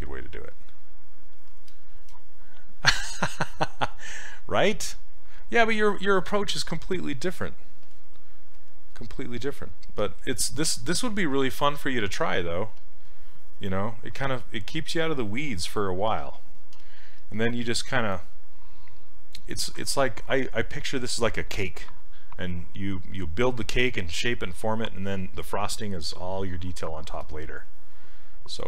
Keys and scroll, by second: 16.8 s.